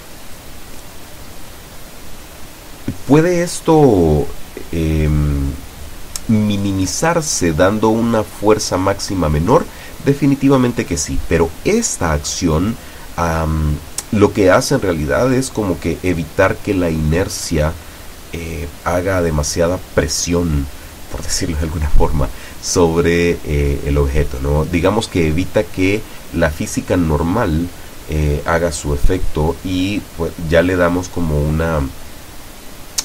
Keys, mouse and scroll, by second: 16.5 click, 17.5 click, 18.5 click, 19.9 click, 21.8-22.4 drag.